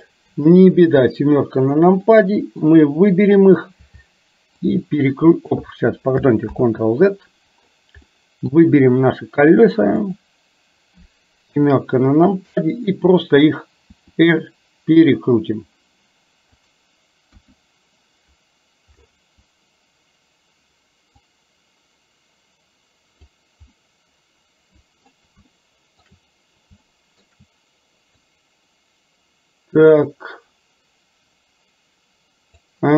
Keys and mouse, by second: 0.3 KP_7, 2.1 middle click, 4.7 click, 6.6 ctrl+z, 8.1 middle click, 11.6 KP_7, 14.0 r, 17.4 KP_1, 21.3-23.3 drag, 23.8-25.1 middle drag, 25.6 shift+middle click, 27.0 shift+middle click, 28.4-32.7 drag.